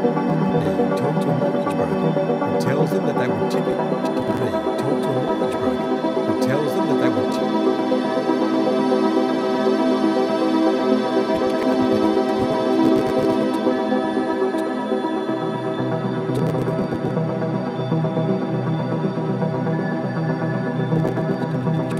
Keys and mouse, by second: 0.0-0.8 typing, 0.3-1.1 drag, 3.6-4.2 typing, 4.0 click, 8.2 ctrl+s, 10.1-10.8 drag, 11.3-14.5 drag, 15.4 i, 16.3 click, 17.8-18.2 typing, 20.0-21.9 shift+drag.